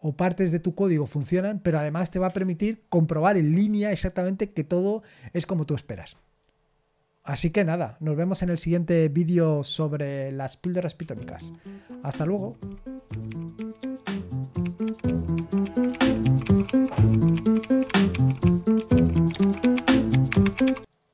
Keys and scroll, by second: 10.9 super+x.